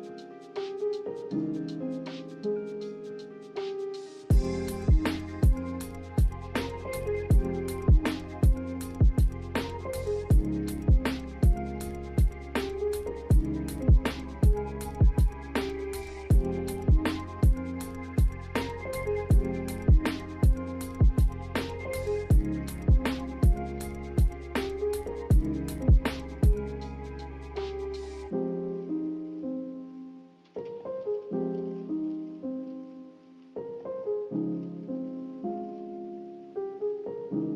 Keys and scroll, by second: 4.5 a, 8.9 z, 15.5-16.5 typing, 27.4 a, 28.5-29.4 typing.